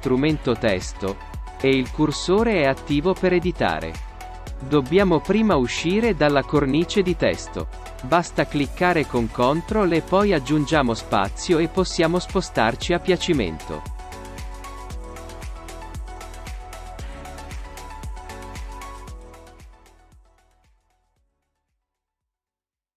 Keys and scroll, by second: 7.6 ctrl+space, 10.6 space.